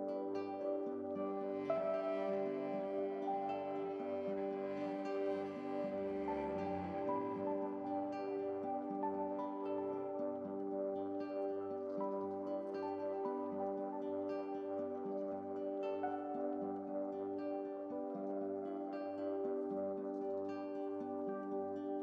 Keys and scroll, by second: 3.0 ctrl+u, 6.7 ctrl+u, 11.5 ctrl+u, 16.1 ctrl+t, 21.5 ctrl+g.